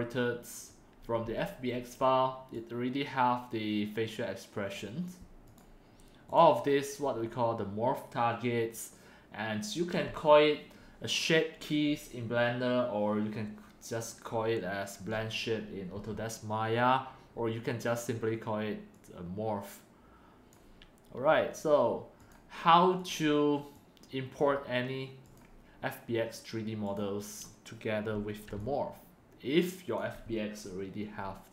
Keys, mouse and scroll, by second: 0.3-3.2 drag, 4.6-5.1 right drag, 5.5 click, 6.3 click, 15.3 click, 20.4 right click, 23.0-24.8 drag, 25.3 right click, 26.8-29.6 drag, 29.9-31.1 alt+drag, 31.3-31.5 scroll up 1.